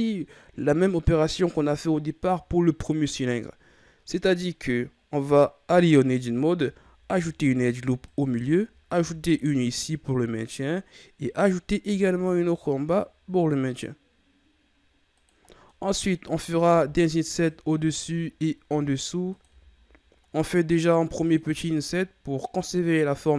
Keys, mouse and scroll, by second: 5.6 Tab, 7.0 ctrl+r, 8.9 ctrl+r, 15.6 middle click, 16.2-16.5 scroll down 2, 16.7 ctrl+Tab, 17.7 right click, 18.6 i, 19.4 i.